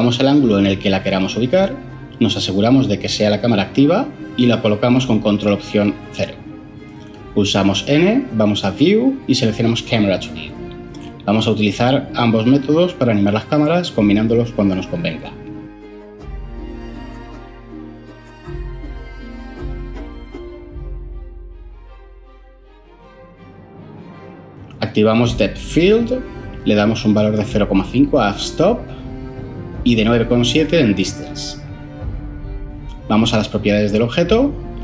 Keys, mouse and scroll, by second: 4.8 ctrl+alt+0, 6.2 n, 17.3 0, 27.3 ,, 28.1 5, 28.6 Return.